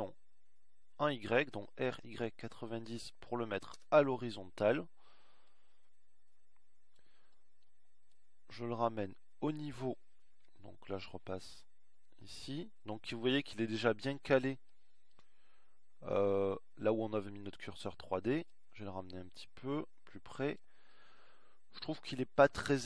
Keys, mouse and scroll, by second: 1.2 r, 9.6 KP_3.